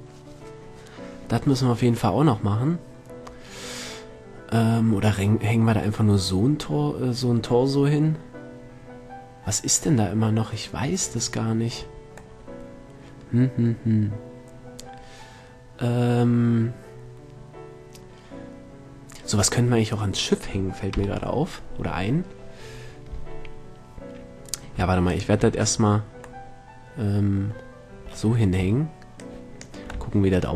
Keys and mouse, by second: 5.3-6.5 middle drag, 11.0 middle click, 12.8-14.4 middle drag, 14.6 middle drag, 21.4 KP_7, 22.2-24.6 middle drag, 25.6-25.9 drag, 25.9 middle click, 26.5 click, 27.2-29.6 middle drag, 29.6 click.